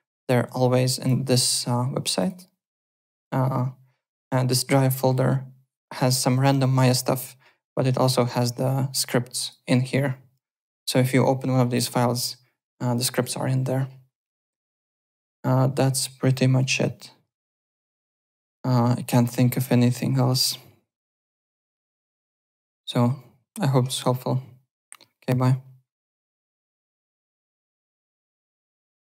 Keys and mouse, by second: 0.4 click, 2.2 click, 4.9 middle click, 6.0 click, 8.2 click, 8.9 click, 14.7 click, 17.4 click, 18.3 click.